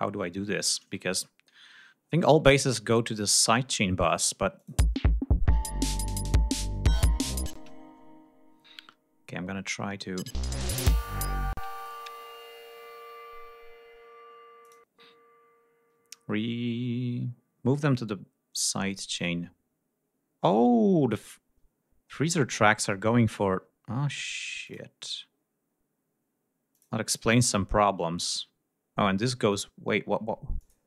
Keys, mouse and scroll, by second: 1.0-1.7 scroll down 4, 2.1 ctrl+scroll down 2, 3.0 scroll up 2, 3.5 scroll down 2, 4.5 click, 4.7 space, 5.4-6.3 scroll down 4, 6.9 scroll down 2, 7.5 space, 7.6-8.6 scroll up 2, 8.8 scroll down 2, 10.1 space, 10.6 click, 11.4 space, 11.6 click, 14.5 click, 16.3-16.8 scroll up 2, 17.1-17.5 scroll up 2, 17.8 scroll up 2, 18.2 scroll down 2, 19.0 click, 24.5 click, 25.2-25.8 scroll up 4, 26.6 click, 28.1 click, 30.4 click.